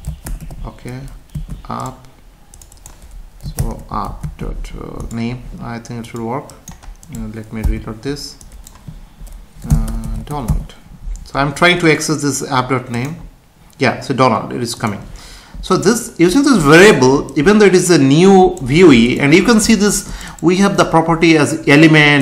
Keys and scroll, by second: 1.3 ctrl+s, 4.3 ctrl+s, 7.6 F5.